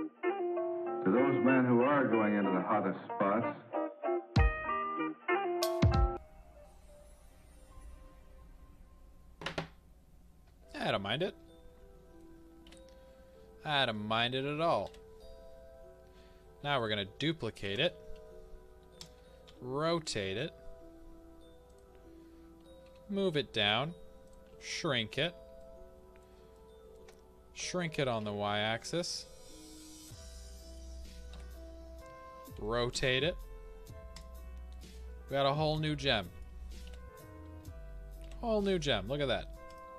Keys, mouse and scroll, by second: 0.2 Tab, 0.3 Tab, 0.4 scroll down 2, 0.8 scroll up 2, 1.0 Tab, 1.4 a, 1.5 click, 2.0 middle click, 2.7 a, 3.2 click, 3.7-16.8 middle drag, 3.9 Tab, 4.6-8.5 scroll up 2, 8.5-9.5 scroll up 1, 9.5-10.1 scroll down 2, 10.1-10.7 scroll up 2, 12.6 KP_1, 13.3 scroll down 1, 14.8 KP_3, 16.8 click, 17.6 shift+d, 19.0 click, 19.5 r, 21.7 click, 22.9 g, 24.3 click, 24.5 s, 25.2-25.5 drag, 25.5-26.5 middle drag, 27.6 s, 28.8 drag, 29.0-31.3 middle drag, 32.5 r, 34.1 click, 34.6 middle click, 39.7 click.